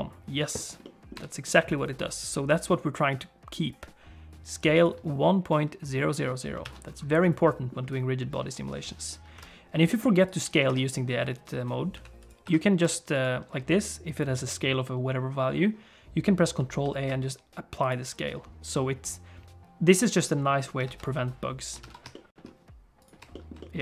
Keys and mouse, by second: 0.8 middle click, 1.1 n, 4.7 click, 6.6 alt+a, 7.2 middle click, 9.3 KP_1, 9.9 middle click, 10.3 click, 10.7 Tab, 12.0 s, 12.4 Tab, 12.8 s, 16.7 ctrl+a, 20.9 alt+a, 21.9 ctrl+s, 23.3 shift+middle click, 23.5 middle click.